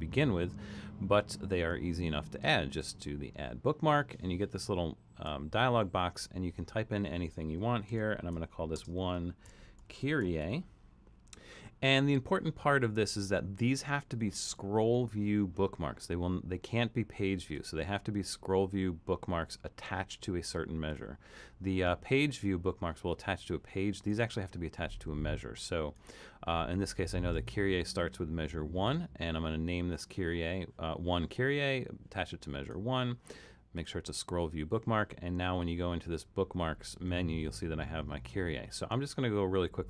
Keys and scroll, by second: 7.9-10.9 typing.